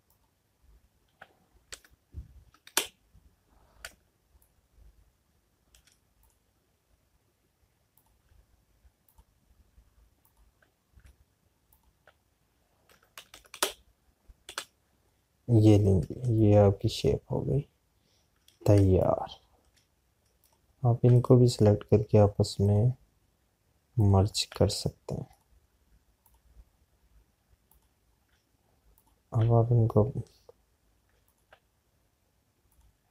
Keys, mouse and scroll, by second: 3.0 Right, 4.8 space, 10.3 shift+click, 16.6 Left, 17.2 click, 18.1 space, 23.5 shift+click.